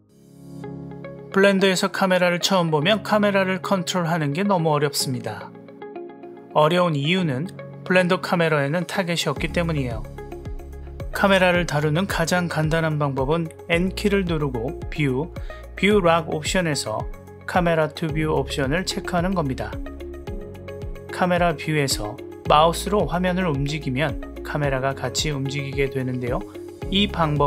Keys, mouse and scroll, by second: 1.5 g, 3.7-4.2 drag, 6.2 click, 7.2-8.9 drag, 8.9 g, 10.9 click, 13.9 n, 16.8 click, 20.0 n, 20.7 click, 21.2-22.4 middle drag, 24.7-26.3 middle drag, 26.6-27.3 middle drag.